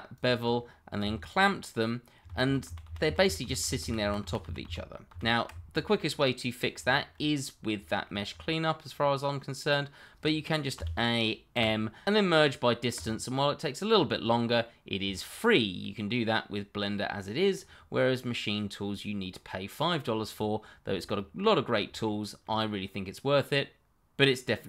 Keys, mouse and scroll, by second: 0.2 double click, 1.0 g, 1.3 click, 2.4 ctrl+z, 5.6-5.9 scroll down 1, 5.9 middle click, 6.6-6.9 scroll down 1, 6.9 shift+middle click, 7.5 scroll down 1, 7.8 shift+middle click, 8.2-10.3 scroll up 1, 10.7 a, 11.5 m, 12.9 click, 13.8-14.6 scroll down 1, 14.6 middle click, 15.3 shift+middle click, 15.8 middle click, 21.1-21.8 scroll up 1, 22.0 shift+middle click, 22.1 middle click, 22.1 shift+middle click, 22.7 scroll down 1, 22.8 middle click.